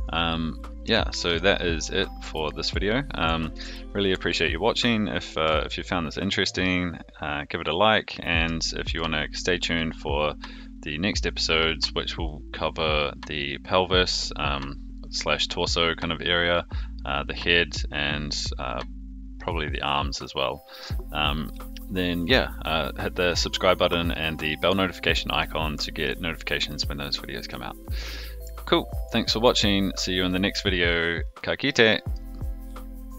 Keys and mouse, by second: 0.9-1.2 shift+middle drag, 1.5-2.4 middle drag, 2.5 a, 4.1 alt+g, 5.3 alt+r, 6.3-6.6 middle drag, 8.5 shift+middle drag, 9.7-11.1 middle drag, 24.1-25.4 middle drag, 25.7-26.6 middle drag, 28.1-28.4 middle drag, 29.1-32.1 middle drag.